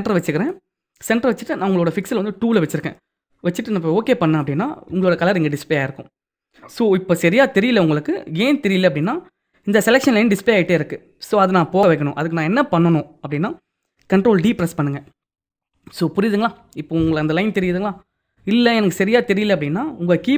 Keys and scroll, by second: 14.3 ctrl+d.